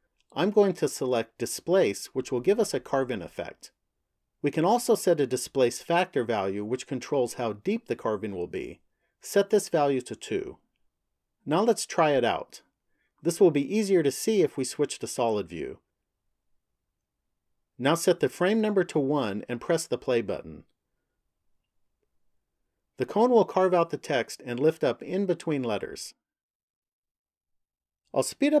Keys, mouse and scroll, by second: 8.3 click, 14.4 click, 18.7 click, 20.5 click.